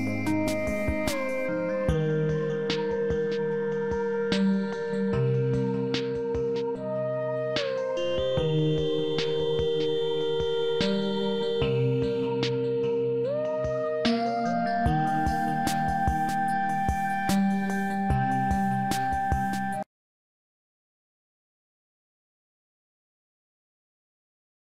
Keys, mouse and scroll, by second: 0.3 click, 2.0-2.9 scroll up 1, 3.7 click.